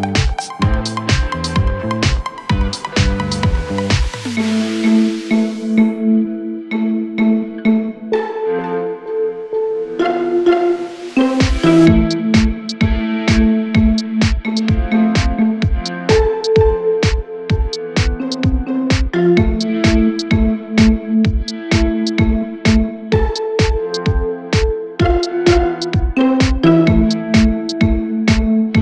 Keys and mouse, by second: 7.9-10.0 shift+middle drag, 8.3 shift+d, 8.8 s, 10.0-12.7 drag, 11.3 s, 12.7-16.1 middle drag, 13.5 s, 14.1 s, 16.1-22.7 drag, 22.7-23.8 middle drag, 23.3 shift+d, 23.8-27.9 drag, 26.0 KP_Divide, 27.2 s, 27.9-28.8 middle drag, 28.1 s.